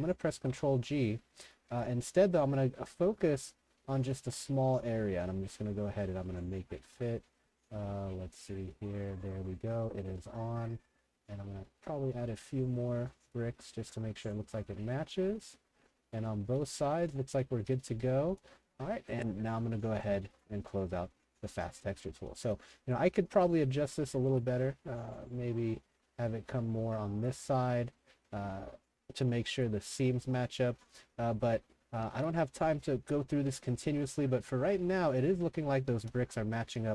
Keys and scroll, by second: 0.4 ctrl+g, 16.3-18.2 typing, 21.1 3, 21.4 Escape, 22.2 a, 22.5 w, 24.3 ctrl+g, 31.3 3, 31.7 Escape, 32.1 s, 33.7-36.9 typing.